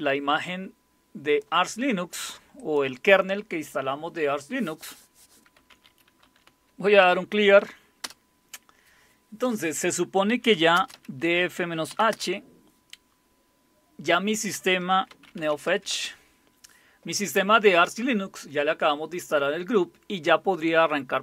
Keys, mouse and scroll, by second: 2.6 click, 5.3-7.0 typing, 8.0 typing, 10.0-12.1 typing, 14.9-16.0 typing.